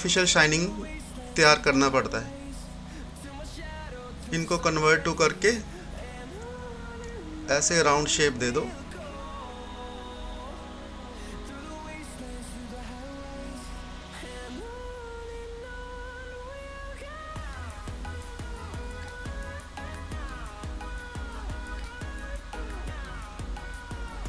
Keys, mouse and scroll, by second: 13.8 scroll up 1, 14.2-15.2 typing, 15.4-24.2 drag.